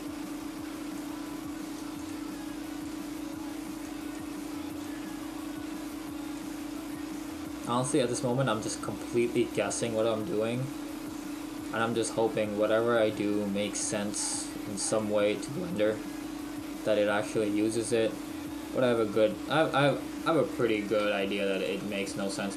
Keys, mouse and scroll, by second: 0.4 click, 1.8 click, 9.3 click, 11.6 click, 19.9 click, 21.1 Delete, 21.1 click, 21.6 click, 21.9 Delete.